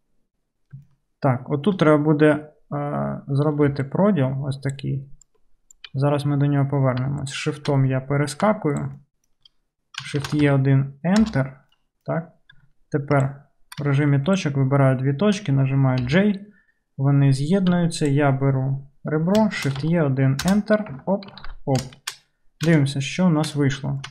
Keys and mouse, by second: 0.9-3.0 shift+middle drag, 3.0-7.1 right drag, 3.8 d, 3.9-7.1 drag, 3.9-7.4 middle drag, 4.7-5.3 d, 5.8 d, 7.4 shift+click, 7.9 middle click, 8.0 click, 8.1 middle click, 8.2 click, 8.3 middle click, 8.4 shift+click, 8.8 shift+middle click, 8.9 shift+click, 9.0 shift+middle click, 9.1 shift+click, 9.2 shift+middle click, 9.5-14.3 drag, 10.2 shift+e, 12.6 1, 14.3 shift+middle click, 14.4-18.0 shift+drag, 16.0 j, 17.8 2, 18.0 middle click, 18.1-21.8 drag, 19.7 shift+e, 21.0 Tab, 21.5 alt+z, 21.8 shift+middle click, 22.5-24.1 shift+drag.